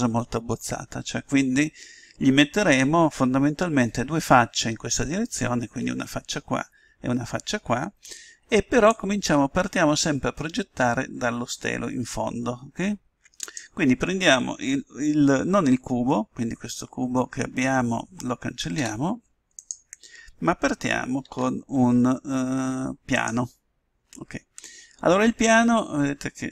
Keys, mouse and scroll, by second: 8.8-10.5 drag, 18.7 Delete, 21.2 shift+a.